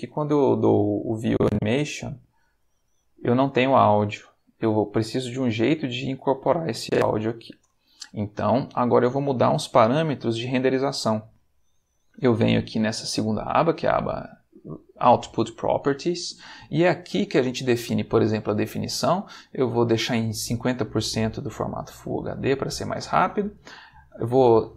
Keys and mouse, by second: 1.1 click, 2.6 click, 6.8 click, 16.6 middle click, 22.3 middle click.